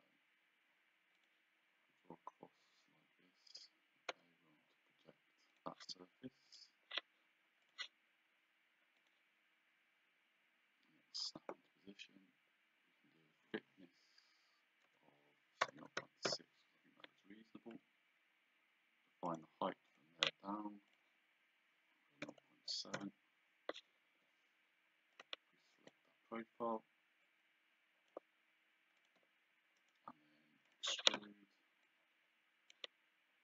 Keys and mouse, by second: 1.2 click, 3.5 Escape, 4.2 p, 5.6 click, 7.7 click, 9.1 click, 14.9 Tab, 15.7 KP_0, 15.9 KP_Decimal, 16.3 Return, 17.8 d, 19.4 click, 22.3 KP_0, 22.8 KP_7, 23.0 Return, 24.1 Escape, 25.2 click, 25.8 shift+click, 27.3 shift+click, 29.1 shift+click, 29.8 right click, 30.8 click, 31.9 click.